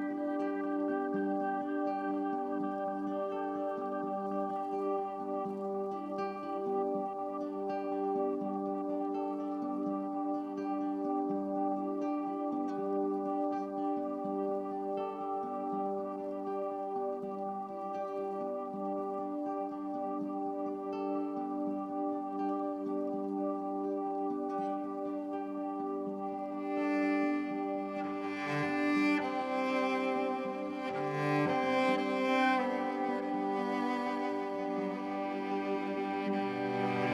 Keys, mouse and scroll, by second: 3.5-8.2 drag, 8.2 Tab, 8.6-10.0 drag, 10.2 Delete, 11.2 click, 12.2 e, 14.3 click, 15.1 Tab, 16.0 alt+shift+click, 16.4 ctrl+alt+click, 16.9 alt+shift+drag, 18.4 r, 18.6 y, 19.7 shift+click, 20.0-21.2 drag, 20.1-21.5 typing, 24.8-25.7 ctrl+alt+drag, 27.5-28.8 drag, 29.0 alt+shift+click, 29.6-30.2 ctrl+alt+drag, 30.2 typing, 32.3 click, 34.0 click, 35.2 click, 36.0 Tab, 36.9 alt+a.